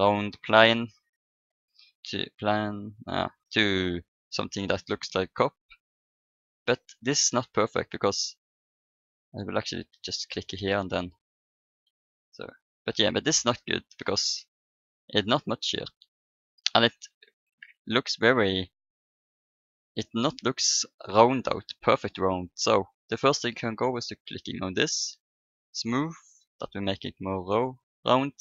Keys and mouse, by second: 0.6 KP_7, 4.3-6.7 middle drag, 9.4 e, 11.0 click, 11.6 Tab, 25.3-27.9 drag, 27.5 Tab.